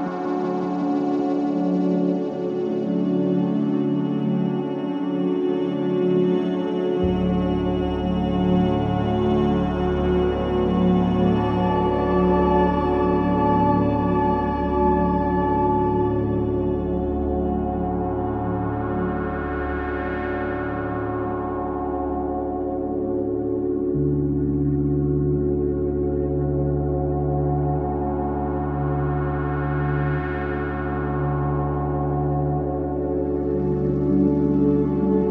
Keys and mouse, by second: 1.4 click, 2.1 click, 2.5 click, 4.3-25.7 drag, 26.2 click, 28.2-34.1 drag, 28.3-29.6 middle drag.